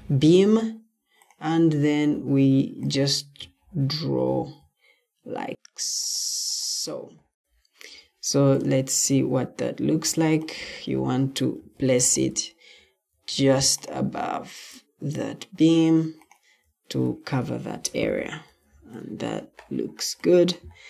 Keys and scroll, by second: 11.5 Escape, 13.2 ctrl+d, 16.9 Escape.